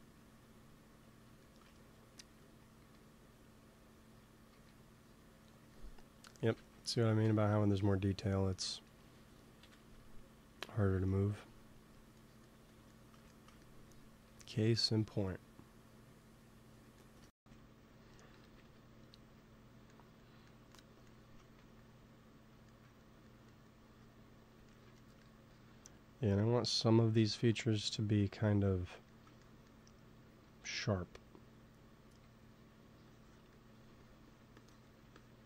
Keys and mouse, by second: 1.6-3.0 middle drag, 2.2 f, 2.7 f, 3.2-7.0 drag, 4.4 f, 6.5 ctrl+z, 7.1 ctrl+s, 9.5 KP_1, 10.5 KP_3, 12.1-13.7 middle drag, 14.2 f, 14.6-17.5 drag, 17.5 middle click, 18.3 KP_1, 18.5 KP_3, 21.5 ctrl+s, 26.2-27.2 drag, 28.6 click, 29.2 middle click, 30.2 f, 32.0 f, 32.9-35.4 drag, 33.8 f.